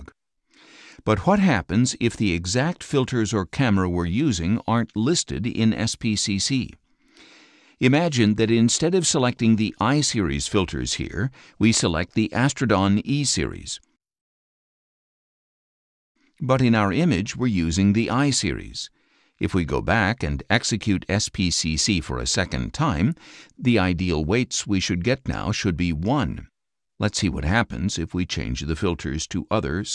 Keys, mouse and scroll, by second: 0.0 click, 2.1 click, 5.8 click, 8.2 click, 13.1 click, 14.1 click, 15.1 click, 15.8 click, 16.7 click, 17.8 right click, 19.1 click, 21.4 click, 27.0 click.